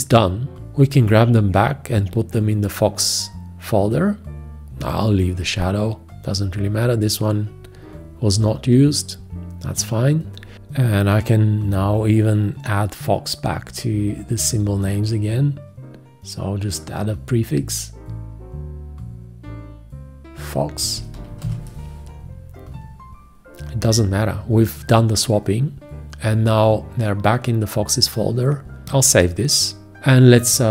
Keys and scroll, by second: 14.7 alt+i, 21.7 space, 30.3 ctrl+Return.